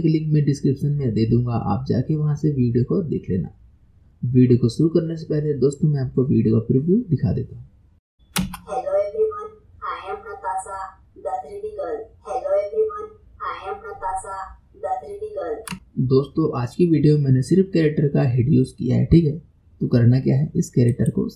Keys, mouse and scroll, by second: 7.2 click, 8.4 space, 20.9 click.